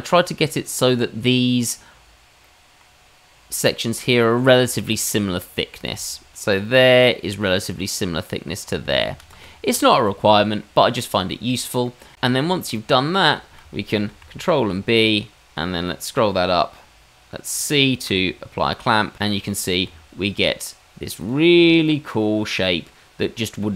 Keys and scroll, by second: 9.1 ctrl+z, 9.3 ctrl+z, 12.1 Tab, 14.1 ctrl+b, 19.8 Tab.